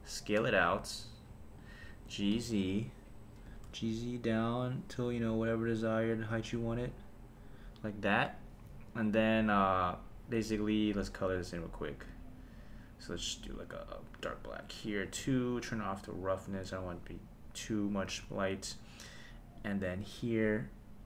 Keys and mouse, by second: 1.6 click, 2.0 g, 2.3 z, 3.5 g, 3.7 z, 6.1 click, 6.5 KP_1, 8.1 KP_0, 12.1-12.8 drag, 13.5 click, 16.5-18.2 drag, 19.6 click.